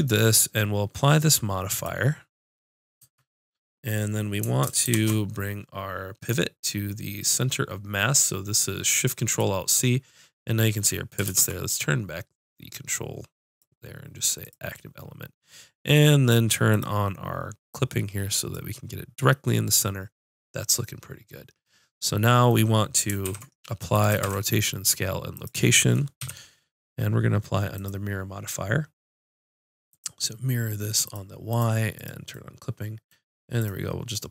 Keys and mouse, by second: 4.8 ctrl+alt+shift+c, 11.2 ctrl+space, 13.4-21.6 drag, 23.2 ctrl+a, 24.2 ctrl+a, 26.1 KP_5, 31.0 click, 32.3-34.3 drag.